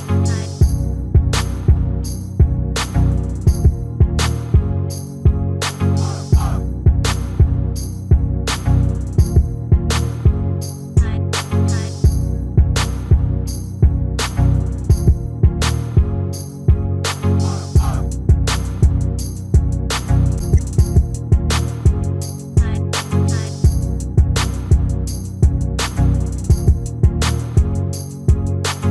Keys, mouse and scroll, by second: 4.5 s, 7.3-12.1 middle drag, 12.1-13.2 scroll up 1, 13.2-14.9 right drag, 14.5-16.7 middle drag, 17.3 ctrl+l, 19.0-21.3 middle drag, 21.8-23.2 drag, 23.5-26.7 drag.